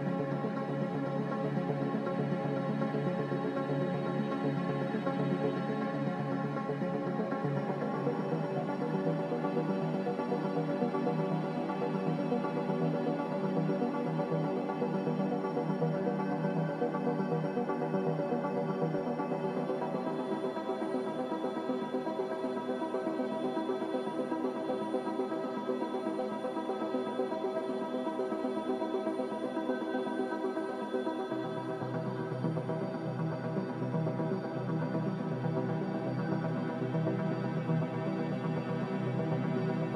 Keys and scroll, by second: 1.4 ctrl+z, 4.5 z, 5.7-6.6 typing, 27.3-28.1 typing, 34.2 b, 39.8 z.